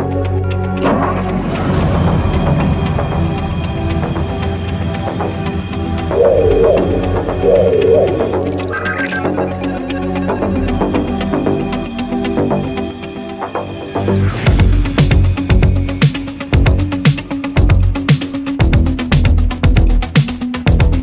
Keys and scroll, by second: 1.4 space, 1.9 space, 2.8 ctrl+z, 19.6 ctrl+z, 19.9 ctrl+z.